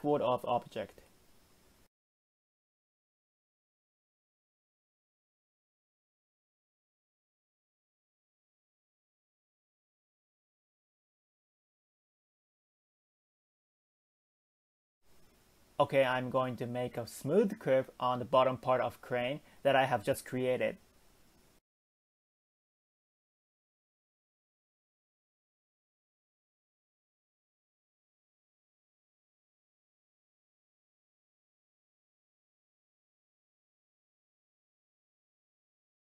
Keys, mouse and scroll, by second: 12.6 middle click, 13.5 click, 14.1 shift+click, 14.7 KP_1, 15.6 g, 19.2-20.2 middle drag, 20.2 click, 20.7 shift+click, 21.2 KP_1, 24.7 middle click, 25.4 click, 25.9 shift+click, 26.4 KP_1, 30.1 middle click, 30.9 click, 31.4 shift+click, 32.9 click, 33.4 shift+click, 34.0 KP_1.